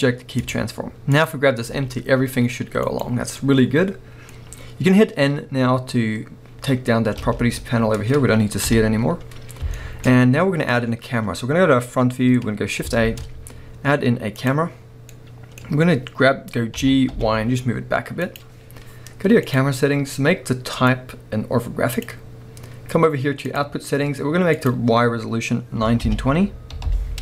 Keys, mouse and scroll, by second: 1.2-1.7 drag, 1.7 g, 3.0 right click, 3.3 scroll down 1, 3.4-18.3 middle drag, 7.2 n, 8.6 KP_1, 10.3-12.4 scroll up 1, 13.0 shift+a, 16.4-16.8 scroll down 1, 16.8 g, 18.3 click.